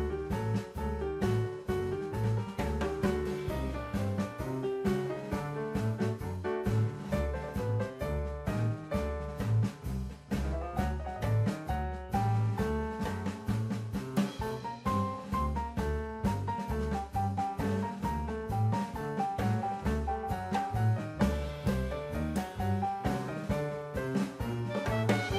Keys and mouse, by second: 2.2-3.0 drag, 4.4-5.0 drag, 5.1 middle click, 6.8 shift+a, 11.3 middle click, 12.4-13.0 middle drag, 13.9-14.8 drag, 15.8 middle click, 16.7-17.5 drag, 19.2 ctrl+t, 20.9 click, 21.7 drag, 22.3 click, 23.1 drag, 23.8-24.4 drag, 25.2 click.